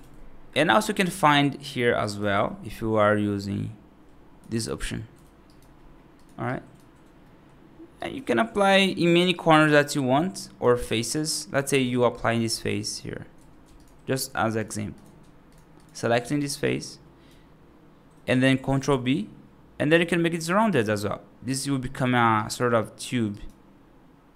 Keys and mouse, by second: 0.8 t, 1.9 right click, 2.2 F3, 5.3 right click, 6.3 right click, 7.1 middle click, 7.8 right click, 8.6 click, 8.7 click, 9.2 right click, 10.3 right click, 10.6 3, 11.0 click, 11.7 click, 12.4 right click, 12.7 click, 13.6 shift+click, 14.0 shift+click, 14.8 shift+click, 16.1 shift+click, 16.5 right click, 18.6 ctrl+b, 21.7 right click, 22.2 right click, 23.2 right click.